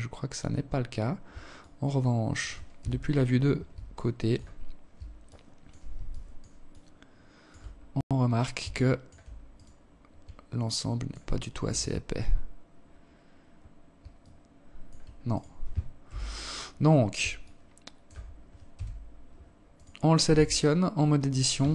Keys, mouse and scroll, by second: 0.0 alt+click, 1.2 KP_3, 2.3 alt+shift+click, 2.9-3.3 scroll down 3, 3.7 alt+shift+click, 6.3-6.6 scroll up 2, 7.0 alt+shift+click, 7.9 right click, 8.9 alt+click, 9.7 alt+shift+click, 10.2-10.9 scroll down 5, 11.4 scroll down 1, 11.9-12.5 scroll down 1, 12.5 alt+click, 13.7 right click, 14.4 KP_3, 15.1-15.5 scroll up 7, 15.6 alt+shift+scroll down 1, 15.7 alt+shift+click, 16.6 scroll down 1, 17.1 KP_3, 18.1 right click, 18.6 Tab, 19.9 s.